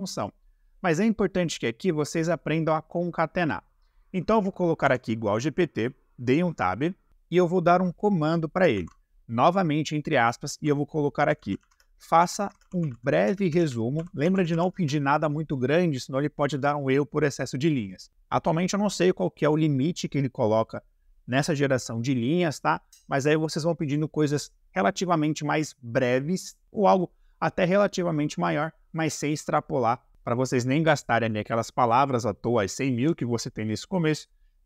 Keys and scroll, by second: 4.8 Tab, 8.8 shift+`, 11.2-14.7 typing.